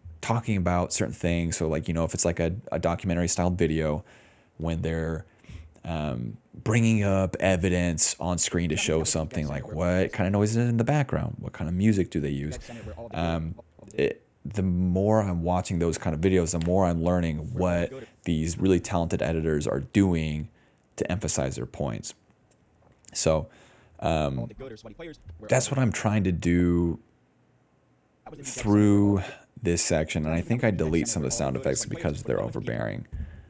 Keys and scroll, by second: 8.6-10.3 typing, 12.3 space, 12.8 s, 13.3 space, 14.0 s, 15.9 d, 17.4 space, 18.0 space, 24.3 space, 25.6 space, 27.7-32.6 typing.